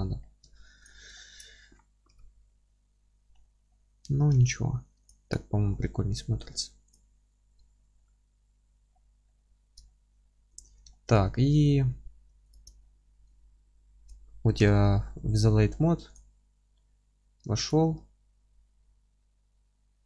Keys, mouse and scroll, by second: 0.0 scroll down 1, 0.2 scroll up 1, 0.5 alt+z, 0.9 click, 1.2-5.1 alt+middle drag, 2.1 KP_1, 3.4 scroll up 1, 4.3 g, 5.1 click, 5.4-6.9 alt+middle drag, 5.8-6.3 scroll down 1, 6.9 click, 7.2 scroll down 1, 7.3-10.6 middle drag, 8.6-8.9 scroll up 1, 8.9-9.3 scroll down 1, 9.5-9.9 scroll up 1, 10.2-10.6 scroll up 1, 10.6 click, 10.7 z, 10.9-12.5 alt+middle drag, 11.4-12.5 scroll down 2, 12.5 ctrl+click, 12.8-13.1 scroll down 2, 13.1 middle drag, 13.3 alt+q, 13.9 alt+middle click, 14.6 KP_7, 15.1-15.5 scroll up 1, 16.2 click, 16.5-17.5 middle drag, 17.5 alt+z, 17.8-18.8 middle drag, 18.8 g.